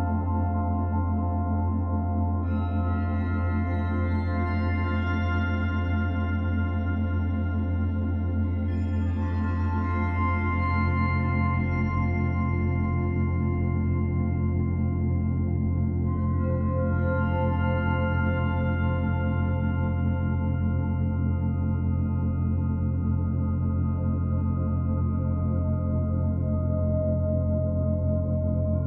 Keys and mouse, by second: 1.4-2.2 drag, 3.4-4.2 drag, 4.5 Escape, 8.5-9.4 drag, 10.0-11.7 drag, 11.9-15.4 typing, 16.8-17.5 typing, 19.2-19.9 typing, 21.2 drag, 22.3 click, 24.0 click, 25.0-25.5 typing, 25.1 alt+a, 26.6-28.8 drag.